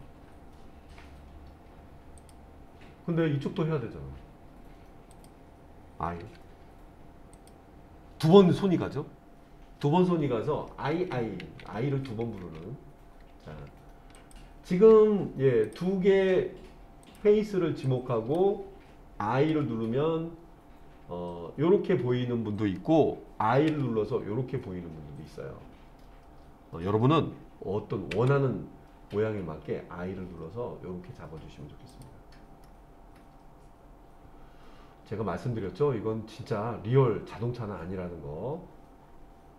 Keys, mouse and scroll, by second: 2.2-5.3 drag, 6.2 i, 7.3 click, 10.9 ctrl+z, 11.4 ctrl+z, 12.4 ctrl+z, 14.2 shift+click, 15.7 click, 17.1 click, 17.8 click, 19.5 i, 23.7 i, 28.1 i, 31.9 click, 32.7-39.5 middle drag.